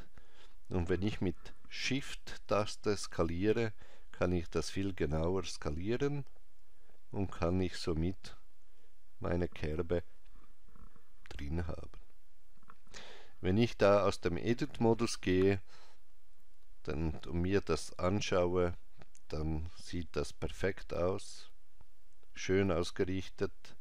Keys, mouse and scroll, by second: 14.2 Tab.